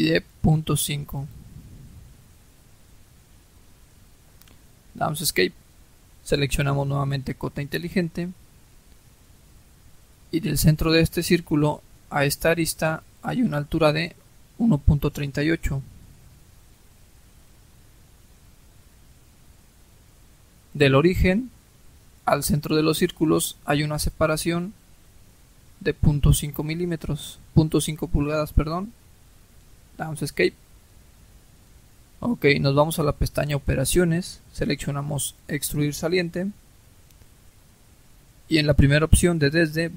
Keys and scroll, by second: 2.1-2.8 typing, 3.1 Return, 4.5 Escape, 15.4-16.7 typing, 17.1 Return, 26.3-27.2 typing, 28.4 Return, 29.7 Escape.